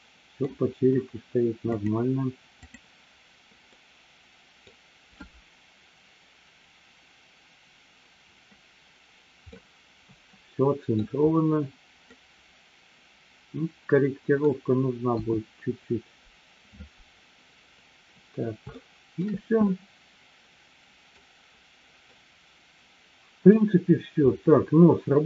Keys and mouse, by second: 1.8-3.3 drag, 3.8 middle click, 9.5-11.0 middle drag, 12.2-14.4 middle drag, 15.2 KP_1, 18.8-19.2 shift+middle drag, 19.7-21.2 middle drag, 22.2-23.5 middle drag.